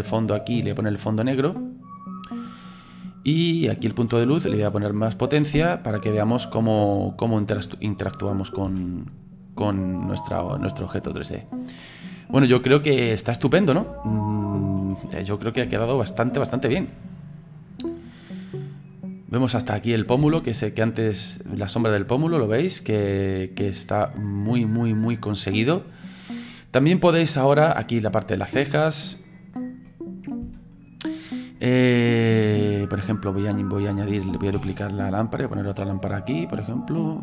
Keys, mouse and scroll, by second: 2.0 click, 4.5-6.7 drag, 6.7-8.6 middle drag, 8.6 g, 12.5-14.3 middle drag, 14.3 scroll up 3, 15.7 d, 17.9-20.2 middle drag, 20.2 g, 22.4-23.6 middle drag, 23.6-26.6 drag, 28.4-29.5 middle drag, 29.5-29.8 scroll down 3, 29.8 middle click, 30.4 g, 31.8-33.5 middle drag, 33.5-34.6 drag, 34.6 shift+d, 36.3-37.2 middle drag.